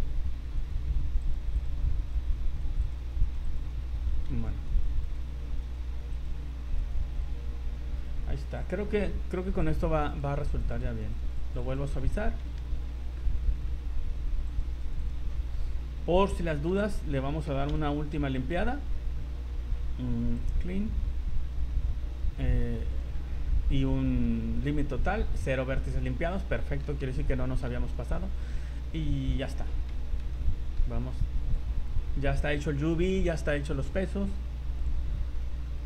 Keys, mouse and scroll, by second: 0.6 right click, 1.2 click, 1.5 click, 2.0 right click, 2.6 click, 2.8 click, 3.2 right click, 3.4 click, 4.4 ctrl+z, 4.7 click, 5.0 click, 5.6 right click, 6.1 click, 6.8 right click, 7.1 click, 8.6 click, 9.6 click, 10.6 click, 10.9 click, 11.3 click, 11.5 click, 11.7 click, 11.9-12.3 scroll down 2, 12.8 ctrl+z, 12.8 scroll down 3, 13.2 middle click, 13.7 middle click, 13.7 scroll down 1, 13.9-14.3 scroll up 5, 14.5 click, 14.8 click, 15.0 click, 15.3-15.6 scroll down 6, 15.8 middle click, 16.2-18.8 typing, 17.4 Escape, 19.7 scroll down 4, 20.3 click, 22.3-22.7 scroll down 2, 22.9 click, 23.7-24.1 scroll down 2, 24.5 click, 26.2 scroll down 2, 26.6 middle click, 27.0 v, 27.3 middle click, 27.8 z, 27.8 scroll up 2, 28.2 middle click, 29.2 middle click, 29.7 scroll down 2, 30.3 middle click, 31.5 click, 32.1 scroll up 2, 34.8 click, 35.7 Escape.